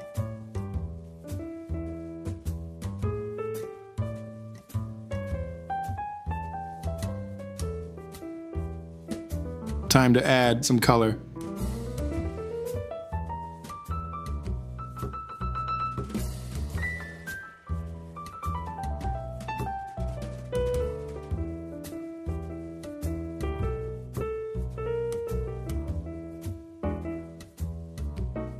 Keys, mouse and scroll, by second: 1.3 ctrl+s, 9.9 q, 10.4 q, 12.3 Return, 12.6 u, 13.8 Return, 15.3 Return, 15.6 Return, 16.1 Return, 16.8 Return, 17.1 Return, 17.7 Home, 18.9 shift+Down, 19.1 t, 19.6 q, 20.2 e, 21.0 Home, 21.3 q, 21.3 shift+Down, 22.5 q, 23.6 ctrl+z, 24.1 t, 24.2 Escape, 25.3 u, 25.7 Down, 26.0 Escape, 26.1 ctrl+s, 26.5 q, 27.6 BackSpace, 28.1 shift+Left.